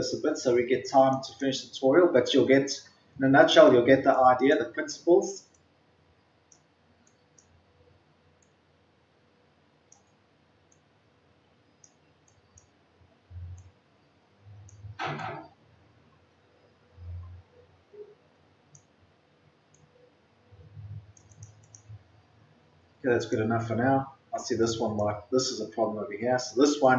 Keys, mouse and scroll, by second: 2.3-3.4 ctrl+scroll up 1, 4.1-5.5 drag, 5.5 scroll down 1, 5.6-6.4 scroll up 1, 7.0-15.1 drag, 15.4-17.1 scroll down 1, 17.3 scroll up 1, 19.5 scroll up 1, 19.7 click, 21.9 scroll down 1, 23.1 click, 24.0-24.4 scroll up 1, 24.5-26.9 drag.